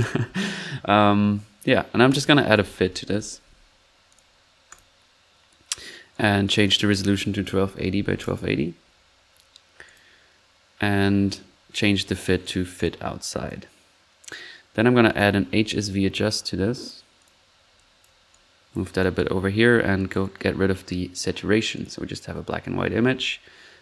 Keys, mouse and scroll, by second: 2.1 click, 2.2-3.6 typing, 4.3-4.7 drag, 4.9 click, 6.1 drag, 6.6-7.0 drag, 9.8 click, 11.9 click, 12.7 click, 13.2-13.6 drag, 15.6-16.3 typing, 17.0 drag, 17.4 click, 17.4 middle click, 17.7 click, 18.2 middle click, 18.3 click, 19.0 drag, 20.0 click.